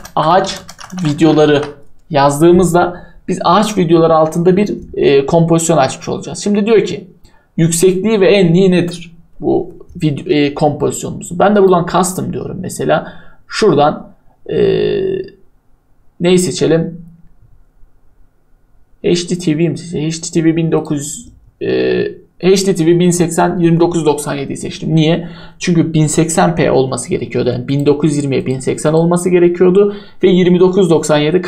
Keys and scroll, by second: 0.0-1.8 typing.